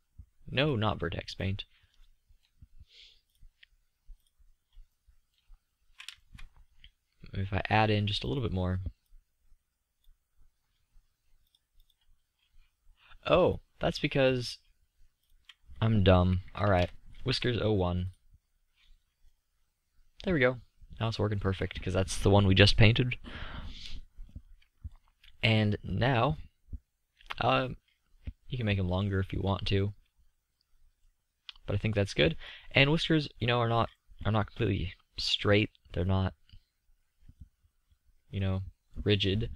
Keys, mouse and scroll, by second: 1.0 click, 13.2 click, 13.4-14.4 drag, 14.4 middle click, 14.5-18.1 drag, 18.1-19.2 middle drag, 20.1-22.2 middle drag, 23.1-25.1 middle drag, 25.5 middle click, 28.8-30.3 middle drag, 37.0-37.5 middle drag.